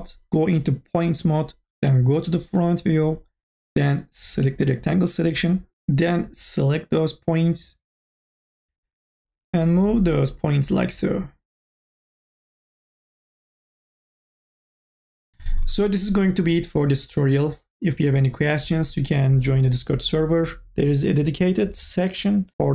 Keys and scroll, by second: 8.7 ctrl+z, 12.6 q.